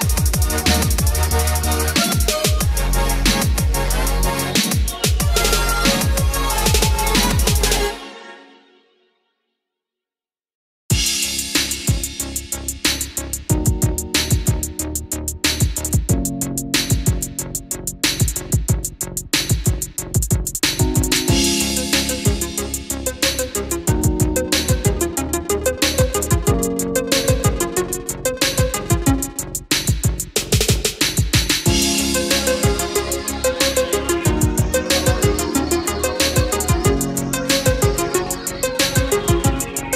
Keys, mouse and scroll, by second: 0.3 middle click, 2.0 click, 2.8 ctrl+click, 11.4-14.1 middle drag, 14.1 scroll up 1, 14.4 middle click, 15.1 scroll up 1, 15.5-15.9 scroll down 1, 18.0-18.7 scroll up 1, 20.6 click, 20.9 scroll down 1, 21.1 middle click, 22.3 ctrl+click, 22.6 scroll down 1, 24.6 click, 27.4 KP_1, 32.3 click, 34.5 scroll down 1, 34.9-37.0 middle drag, 37.1 click, 38.2-39.9 ctrl+drag.